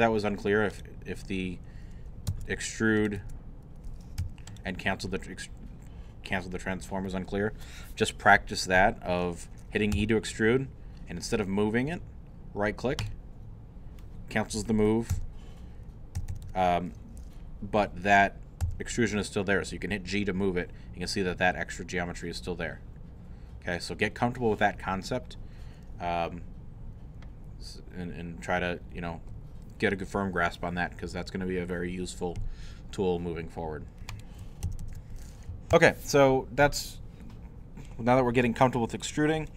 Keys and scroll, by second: 2.3 Tab, 3.2 Tab, 4.6 3, 9.9 e, 15.1 w, 18.6 g, 34.6 ctrl+z, 35.5 ctrl+super+z.